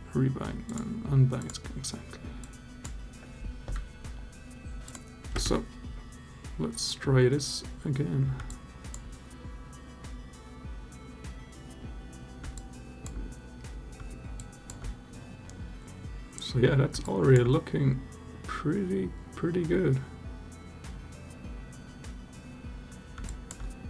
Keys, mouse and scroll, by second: 0.4 click, 2.3 click, 4.6 click, 5.1 space, 8.3-8.9 alt+drag, 12.4-12.9 alt+drag, 14.2-14.5 alt+drag, 16.9 alt+drag, 23.0 alt+drag.